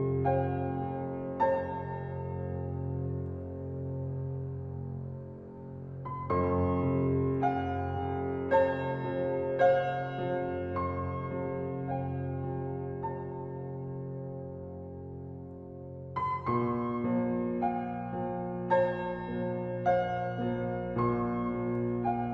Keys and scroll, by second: 3.2 ctrl+c, 5.1 ctrl+v, 7.7 ctrl+t.